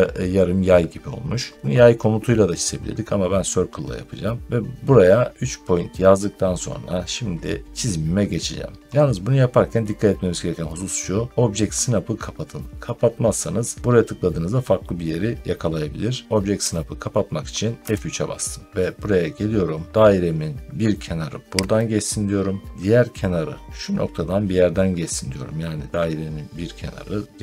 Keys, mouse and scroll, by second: 17.8 F3, 21.7 click.